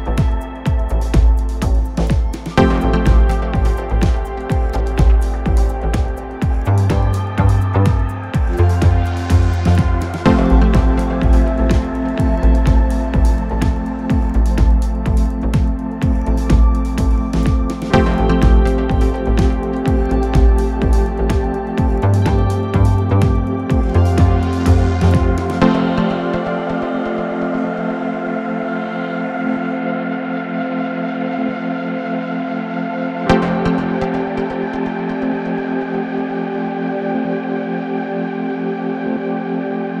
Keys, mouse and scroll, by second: 0.3 middle click, 1.0 i, 2.4 click, 2.5-2.9 scroll up 6, 2.6 middle click, 2.9 middle click, 3.3 scroll down 2, 3.5 middle click, 3.9 Tab, 4.4-5.7 middle drag, 5.7 ctrl+z, 5.8 ctrl+z, 6.1 ctrl+z, 6.7 Tab, 7.4 scroll down 2, 7.6 click, 8.0 middle click, 8.6 ctrl+r, 10.8 shift+click, 12.2 scroll up 1, 12.3 middle click, 12.8 shift+click, 14.1 middle click, 14.7 scroll down 1, 15.0 s, 15.9 scroll up 6, 16.1 click, 16.3 middle click, 16.6 middle click, 17.2-17.8 scroll down 6, 17.8 ctrl+z, 17.9 ctrl+z, 18.0 ctrl+z, 18.2 scroll up 1, 18.2 middle click, 18.4 scroll down 5, 18.6 middle click, 19.1-19.5 scroll down 1, 19.5-20.0 scroll up 1, 20.0 Tab, 20.4 scroll up 3, 20.5 middle click, 20.7 Tab, 21.0 scroll down 7, 21.3 click, 22.3 click, 23.0 scroll up 4, 23.2 middle click, 23.8 scroll down 3, 23.9 Tab, 24.4 click, 24.9 click, 25.4-26.4 middle drag, 26.8 middle click, 27.4 click, 28.0 middle click, 28.4 Tab, 29.3 shift+click, 29.5 middle click, 29.9 click, 30.4 middle click, 30.6 click, 31.1 middle click, 31.4-31.8 scroll up 5, 31.5 middle click, 31.8 middle click, 32.2-32.9 scroll down 7, 32.9-33.9 middle drag, 33.9-34.5 scroll up 10, 34.1 click, 34.2 middle click, 35.0-35.5 scroll down 3, 35.5 Tab, 35.8 click, 36.0 middle drag, 36.2 scroll up 3, 36.3-36.8 middle drag, 36.8-37.6 scroll down 2, 37.6 middle click, 37.7-38.1 scroll down 1, 38.1 click, 38.2 Tab, 38.5 scroll down 1, 38.6 middle click, 39.4-40.0 drag.